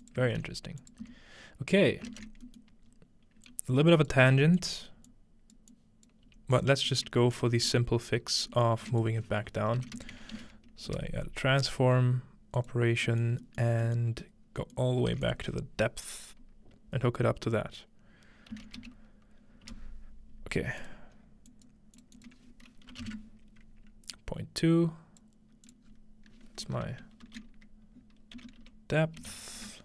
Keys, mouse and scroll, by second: 0.3 ctrl+x, 0.8 click, 1.9-2.9 scroll down 1, 2.1 ctrl+space, 2.9-3.5 scroll up 1, 3.5-9.4 ctrl+drag, 4.3 g, 6.3 typing, 6.9 middle click, 6.9-7.8 scroll down 1, 8.9-11.0 typing, 12.6 click, 12.9 click, 12.9-14.1 scroll down 2, 14.1-15.4 scroll up 2, 14.9-18.5 shift+middle drag, 15.1 shift+a, 15.3-18.5 drag, 18.5 typing, 19.7 Return, 20.8 click, 21.2-23.0 scroll up 1, 21.5 click, 22.0 click, 22.2 click, 22.9-23.6 typing, 24.1-25.2 drag, 25.7 click, 25.9 scroll down 1, 26.7 F2, 26.9-27.7 scroll down 1, 27.2 typing, 28.4-29.8 typing.